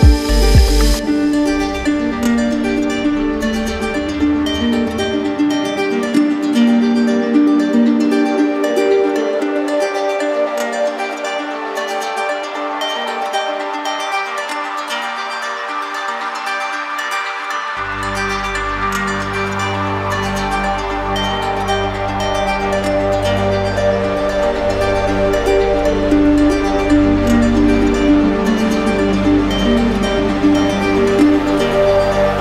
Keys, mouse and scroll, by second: 0.3 alt+click, 0.4 alt+click, 1.9 click, 5.4-6.5 drag, 7.4 click, 8.2-10.0 drag, 11.6-12.7 drag, 19.7-20.8 drag, 26.0-27.1 drag, 27.8-28.9 drag, 30.7-31.7 drag.